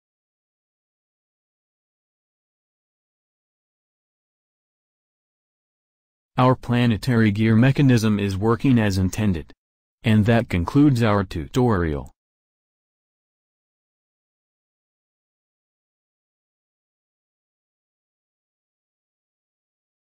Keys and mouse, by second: 4.2 click, 15.3-17.2 middle drag.